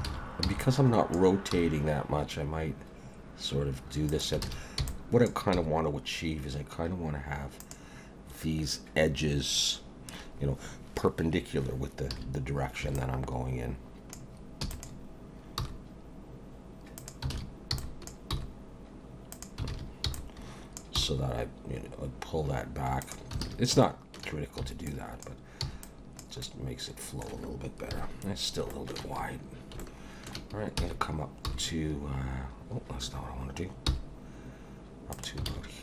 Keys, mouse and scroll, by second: 0.1 alt+a, 0.4 b, 1.5 g, 4.4 alt+a, 4.8 b, 5.5 g, 12.1 alt+a, 12.8 b, 14.6 e, 15.6 g, 17.3 alt+a, 17.7 b, 18.3 g, 19.7 alt+a, 20.1 b, 21.0 g, 23.4 alt+a, 23.8 shift+middle click, 24.6 b, 25.6 b, 26.4 middle click, 27.9 KP_1, 28.7 shift+middle click, 29.2-29.5 scroll up 3, 29.8 shift+middle click, 30.8 e, 35.4 alt+g, 35.5 alt+a.